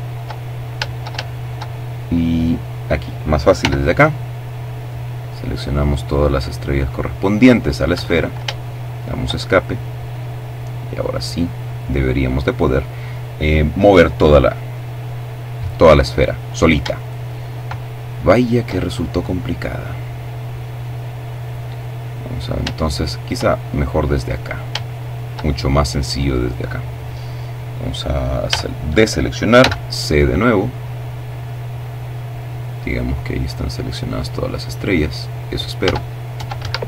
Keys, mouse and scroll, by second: 1.0 middle click, 2.4 c, 2.7-6.6 drag, 6.6 Escape, 7.4 shift+middle click, 8.0-8.4 shift+scroll up 1, 8.8-11.4 drag, 16.1-17.5 shift+middle drag, 17.5-18.1 shift+scroll down 3, 18.1-19.5 middle drag, 21.5 shift+middle click, 22.2 shift+middle click, 23.0-23.5 scroll up 3, 23.5 shift+middle click, 24.1 shift+middle click, 27.2 a, 28.3 c, 28.8-34.6 drag, 34.5 Tab, 35.3 Escape, 36.4 shift+right click.